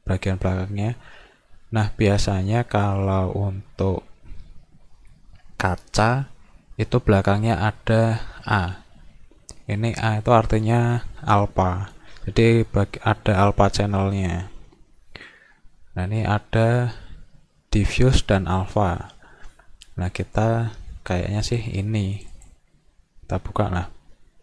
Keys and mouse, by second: 17.8 click, 21.5 click, 22.1 click, 22.3 click.